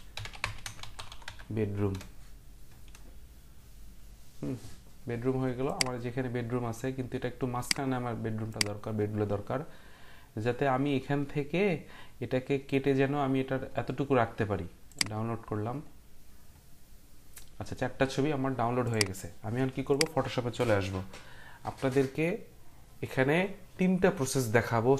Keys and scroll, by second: 0.0-1.8 typing, 1.9 Return.